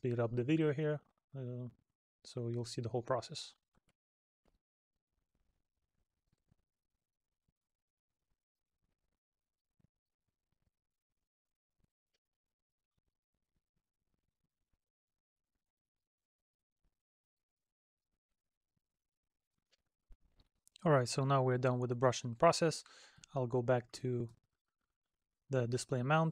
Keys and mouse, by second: 0.7 middle click, 2.1 middle click, 5.2 middle click, 6.0 middle click, 6.6 middle click, 7.0 middle click, 7.3 middle click, 7.6 middle click, 8.4 middle click, 8.7 middle click, 9.1 middle click, 9.5 middle click, 9.8 middle click, 10.3 middle click, 10.7 middle click, 11.0 middle click, 11.2 middle click, 11.5 middle click, 11.8 middle click, 12.1 middle click, 12.2 middle click, 12.8 middle click, 13.0 middle click, 13.8 middle click, 14.7 middle click, 15.0 middle click, 15.2 middle click, 15.7 middle click, 15.9 middle click, 16.4 middle click, 16.5 middle click, 16.8 middle click, 17.2 middle click, 17.5 middle click, 17.8 middle click, 18.5 middle click, 18.8 middle click, 18.9 middle click, 19.3 middle click, 19.9 middle click, 23.5 middle click.